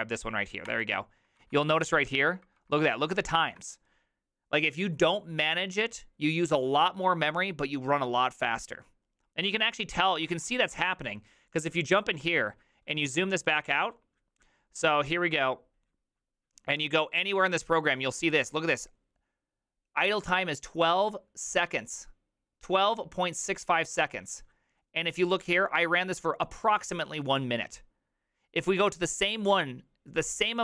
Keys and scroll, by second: 0.7 Return, 1.5 ctrl+d, 1.9 ctrl+d, 2.1 ctrl+d, 2.4 ctrl+d, 9.7 alt++, 10.4 alt+[.